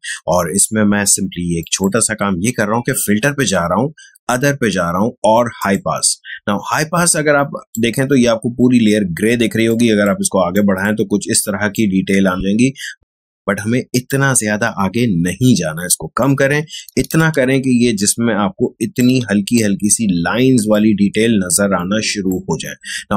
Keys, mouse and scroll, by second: 1.6 click, 5.6-10.6 drag, 14.0-16.8 drag, 16.8 space, 17.1-23.1 ctrl+drag.